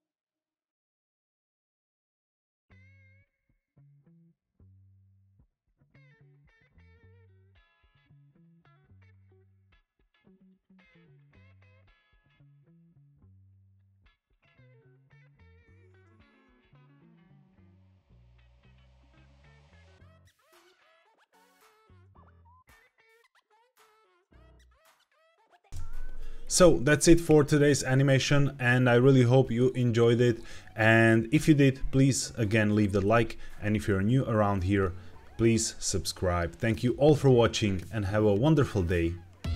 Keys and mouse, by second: 0.0-0.4 typing, 0.8 click, 1.4 click, 1.7 KP_0, 2.5 click, 3.3 g, 3.3 z, 4.0 click, 5.6 click, 6.2-8.3 drag, 8.9-11.8 drag, 12.3 click, 13.0 click, 13.4-14.4 drag, 15.8 click, 16.6 z, 18.4-19.4 drag, 19.8-20.3 drag, 20.7 shift+click, 21.8 space, 23.7 space, 25.1 ctrl+b, 25.7 space.